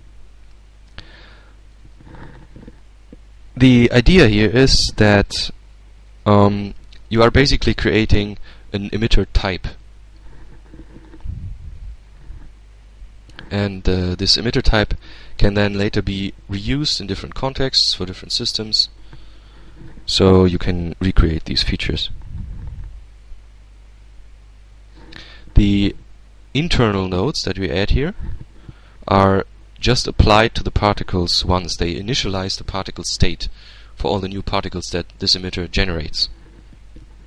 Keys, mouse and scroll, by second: 0.8-1.9 drag, 1.6 Tab, 4.2-5.4 middle drag, 6.7-7.9 middle drag.